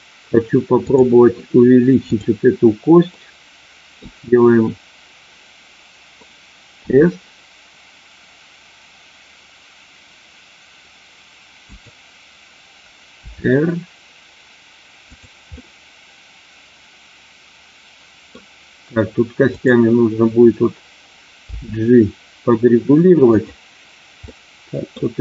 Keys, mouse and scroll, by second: 0.8 click, 2.0 click, 3.1 middle click, 6.8 s, 11.6 click, 13.2 r, 15.0 click, 15.5-18.3 middle drag, 19.5 click, 23.3 click, 23.3 g, 24.3 middle click, 24.8 scroll down 1.